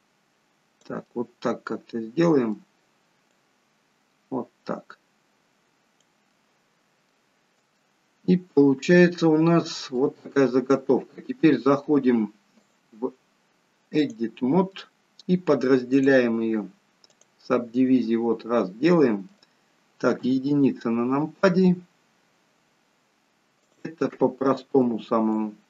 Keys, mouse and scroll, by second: 1.0 middle click, 3.2 click, 6.2 middle click, 7.5 shift+scroll down 1, 7.7 shift+middle click, 9.0 middle click, 12.6 click, 14.7 middle click, 15.9 click, 17.7 middle click, 20.1 KP_1, 21.4 scroll up 1, 22.1-23.2 scroll down 1, 23.6 click, 24.8 b.